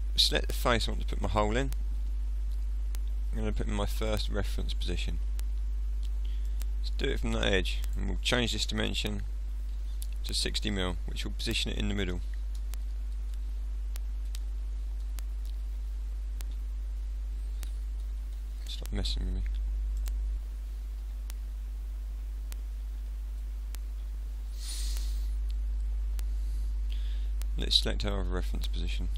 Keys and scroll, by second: 8.9 BackSpace, 10.3 6, 10.7 0, 12.6 BackSpace, 14.0 6, 15.1 BackSpace, 16.6 6, 17.7 BackSpace, 21.1 BackSpace, 23.0 6, 24.0 0.